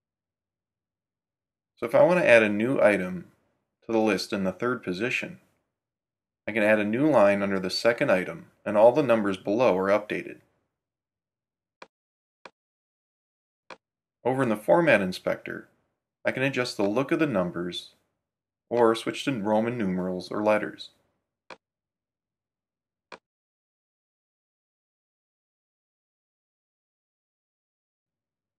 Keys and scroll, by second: 8.3 Return, 8.5-9.6 typing.